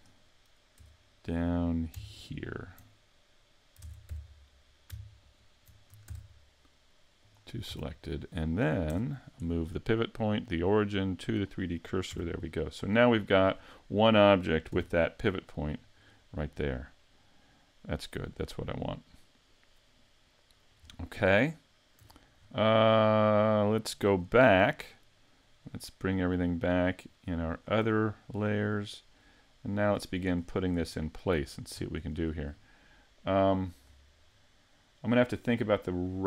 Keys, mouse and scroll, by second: 0.8 Tab, 2.1 alt+right click, 3.8 ctrl+Tab, 5.2 alt+right click, 6.0 shift+s, 7.7 a, 8.9 Tab, 10.1 click, 11.8-12.1 scroll down 5, 12.1 a, 12.5 middle click, 13.2 right click, 13.5-14.7 scroll down 2, 14.7 g, 16.0 right click, 17.0 middle click, 20.8-22.0 scroll up 5, 22.0 a, 22.3-22.8 scroll down 4, 22.8 middle click, 25.6 shift+click, 26.4 shift+click, 27.0 shift+click, 27.5 shift+click, 27.9-28.9 scroll down 7, 28.8 middle click, 30.4-30.7 scroll up 5, 30.8 middle click, 31.8 scroll down 1, 32.2 shift+middle click, 33.9 scroll up 1, 34.3 middle click.